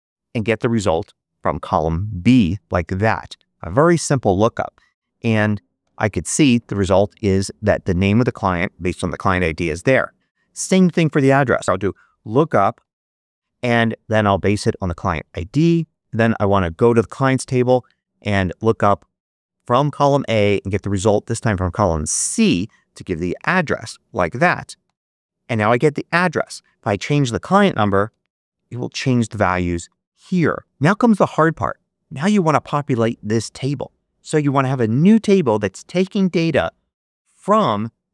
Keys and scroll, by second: 4.7 shift+0, 5.7 shift+Return, 11.2-13.5 typing, 20.1 ,, 23.3 shift+0, 24.7 Return, 27.9 1, 28.0 Return.